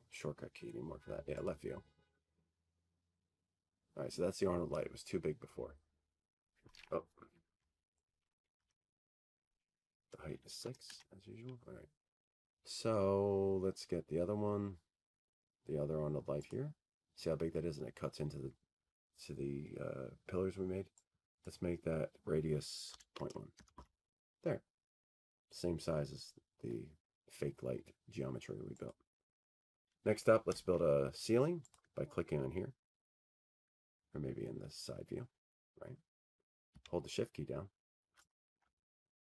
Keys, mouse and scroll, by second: 0.4-1.6 scroll, 4.9 click, 7.1 click, 8.0-8.8 scroll, 8.8-9.1 scroll, 13.1 Escape, 13.9 click, 14.3 BackSpace, 16.4 6, 16.5 Tab, 19.2-20.7 scroll, 20.7-21.8 scroll, 22.1 click, 27.0 click, 28.5 click, 30.0 Tab, 30.9 middle click, 31.1 middle click, 31.3 middle click, 34.7 click, 37.3 click.